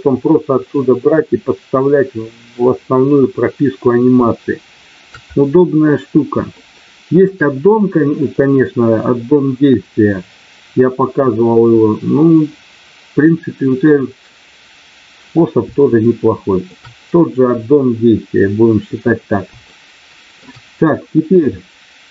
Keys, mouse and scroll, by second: 4.2 shift+middle click, 6.5 shift+middle click, 15.7 shift+middle click, 19.6 shift+middle click.